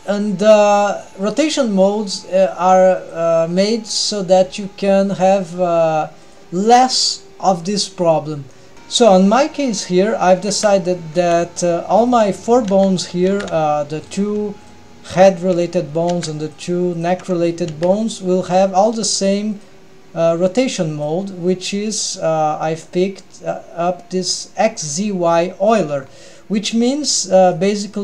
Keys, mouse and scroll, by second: 0.9 click, 5.0 g, 5.6 g, 6.6 middle click, 8.5 middle click, 8.7 ctrl+alt+shift+super+r, 8.7 scroll down 1, 10.6 a, 11.2 alt+a, 12.1 drag, 12.7 a, 13.3 alt+a, 14.1 drag, 14.6 shift+click, 15.3 shift+drag, 16.1 alt+a, 16.5 click, 17.0 shift+click, 17.7 alt+a, 18.7 shift+click, 19.5 click, 21.5-21.9 scroll up 1, 22.6-23.1 scroll up 1, 26.0-26.8 scroll up 2, 26.8-28.0 middle drag.